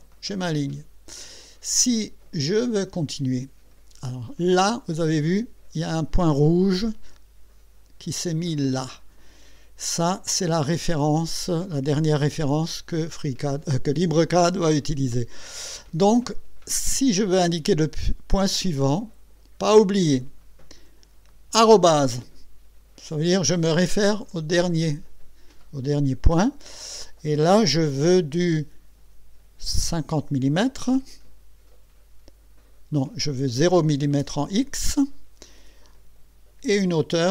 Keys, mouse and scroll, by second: 18.8 click, 30.6 KP_5, 33.4 BackSpace, 34.2 KP_0, 36.7 ,.